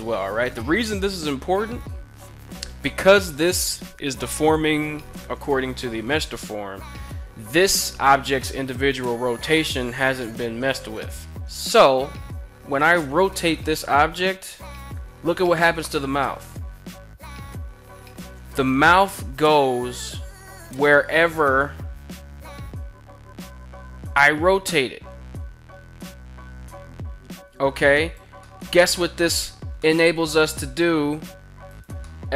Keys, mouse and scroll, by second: 1.0 right click, 2.0 KP_1, 12.8 r, 13.2 r, 27.4 click, 27.9-28.8 middle drag, 29.3 middle click, 29.7 r, 31.3 right click, 31.5-31.8 middle drag, 31.9 r, 32.1 r.